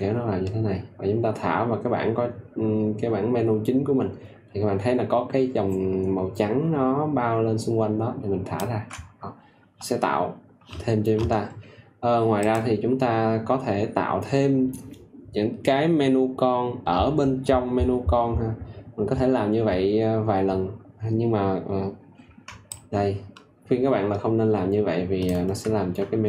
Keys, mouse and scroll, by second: 12.3 click, 22.6 ctrl+click.